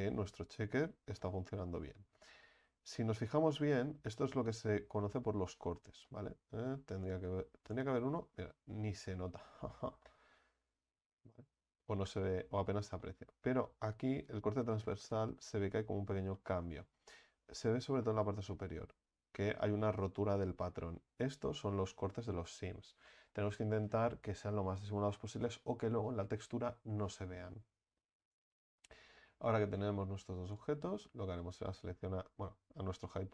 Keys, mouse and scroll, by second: 2.5-3.7 scroll up 6, 3.7 right click, 4.1-4.8 middle drag, 4.8-6.1 scroll down 8, 6.1-9.1 middle drag, 9.5 Tab, 10.0-11.8 middle drag, 11.8 Tab, 12.4-13.0 scroll up 4, 13.0-14.3 middle drag, 14.3-15.2 scroll down 5, 15.2-17.0 middle drag, 17.0-18.1 scroll up 5, 18.1-21.0 middle drag, 21.0-21.5 scroll down 4, 21.5-21.9 scroll up 3, 21.9-22.5 scroll down 3, 22.5 Tab, 23.0-23.4 middle drag, 23.4 Tab, 30.5 click, 31.7 right click.